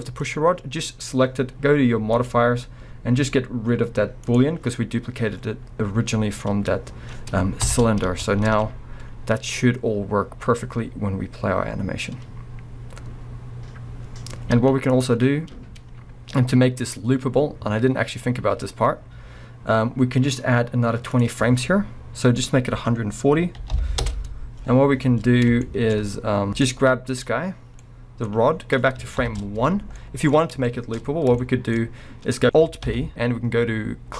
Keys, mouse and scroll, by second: 0.0 click, 2.1 click, 4.2 click, 4.8 scroll up 1, 6.1 scroll down 1, 6.2 drag, 7.6 shift+Left, 8.1 space, 8.2 space, 8.5 alt+a, 8.7 scroll up 1, 9.1 scroll down 1, 13.0-15.0 drag, 14.6 space, 15.8 scroll down 2, 16.8-25.6 drag, 24.1 Return, 25.2 scroll up 1, 25.6-26.5 shift+middle drag, 26.0 scroll up 1, 26.5 click, 27.1 click, 27.5 scroll down 1, 27.8-29.2 middle drag, 28.5-29.0 scroll down 2, 29.0 scroll down 1, 29.2 shift+Left, 30.0 middle click, 30.4 scroll up 1, 30.6 shift+middle click, 31.0-31.5 scroll up 2, 31.5 shift+middle click, 32.4 ctrl+p.